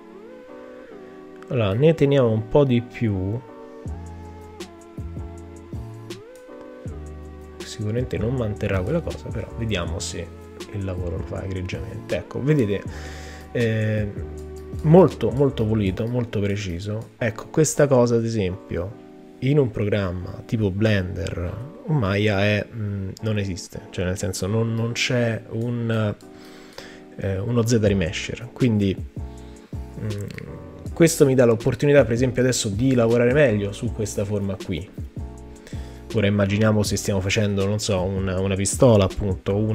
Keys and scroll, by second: 35.8 b.